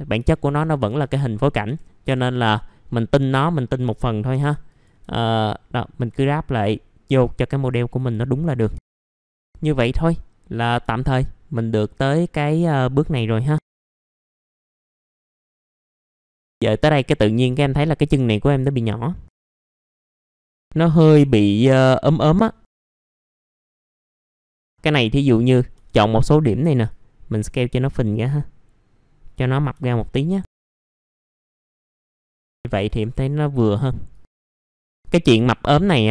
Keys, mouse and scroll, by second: 0.2 alt+middle click, 1.0 click, 1.6 F4, 2.3 middle click, 2.9 scroll up 1, 3.1 F4, 3.7 click, 5.1 alt+middle click, 7.2 click, 8.2 alt+middle click, 8.9 click, 9.0 F4, 9.2-10.1 scroll down 2, 9.5 middle click, 10.1-10.5 scroll up 1, 10.5 click, 11.0 alt+middle click, 13.2 alt+middle click, 13.7 middle click, 13.7 scroll down 1, 14.1 scroll up 1, 14.3 typing, 14.6 scroll down 1, 14.8 alt+middle click, 15.7 scroll up 1, 15.9 click, 16.7 middle click, 19.6 alt+middle click, 19.9 scroll down 1, 20.2 click, 20.3 click, 20.5-21.8 scroll up 1, 22.0 middle click, 22.6 alt+click, 23.0 alt+middle click, 23.4 scroll up 1, 23.5 alt+middle click, 24.1 alt+click, 24.4 middle click, 24.7 scroll down 1, 25.0 alt+middle click, 25.5 scroll up 1, 26.9-29.7 drag, 29.8 alt+middle click, 30.7 scroll down 1, 30.8 alt+middle click, 31.4 F4, 31.5 click, 31.8 scroll down 1, 32.0 F4, 32.3 click, 32.5-32.9 scroll up 1, 32.9 typing, 34.1 click, 34.5-34.9 scroll up 1, 35.0 click, 36.0 typing, 36.0 F3.